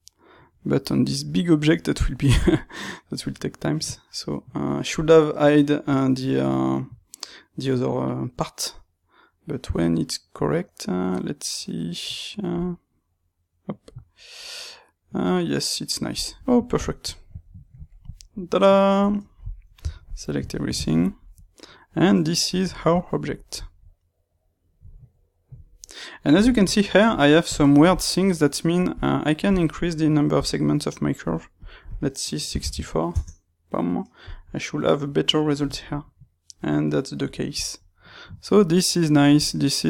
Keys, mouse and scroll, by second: 15.3 click, 16.2-23.2 middle drag, 19.7 a, 23.2-28.9 drag, 30.3-35.7 drag, 35.7-39.8 middle drag.